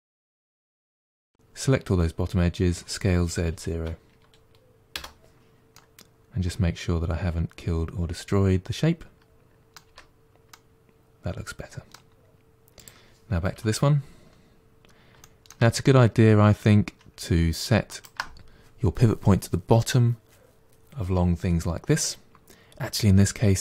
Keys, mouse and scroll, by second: 0.4 2, 0.5 alt+click, 2.6 s, 5.6-8.6 middle drag, 9.8 Tab, 10.1-10.4 scroll down 1, 10.4-12.7 middle drag, 12.7 click, 13.4 KP_1, 14.5-15.1 scroll up 1, 15.1-15.6 shift+middle drag, 15.6-17.8 scroll up 2, 17.8 shift+right click.